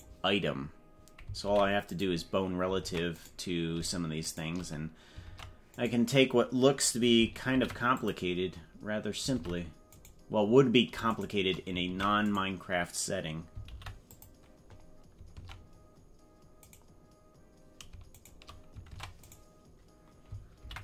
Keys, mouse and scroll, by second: 0.0 right click, 1.4 ctrl+p, 2.8 ctrl+Tab, 3.2 right click, 4.2 shift+right click, 5.2 ctrl+Tab, 5.8 right click, 7.5 ctrl+p, 9.5 ctrl+Tab, 9.9 right click, 11.1 shift+right click, 11.8 ctrl+Tab, 12.3 right click, 13.6 ctrl+p, 15.3 ctrl+Tab, 15.9 scroll down 1, 16.6 right click, 18.1 shift+right click, 18.9 ctrl+Tab, 19.3 right click, 20.5 ctrl+p.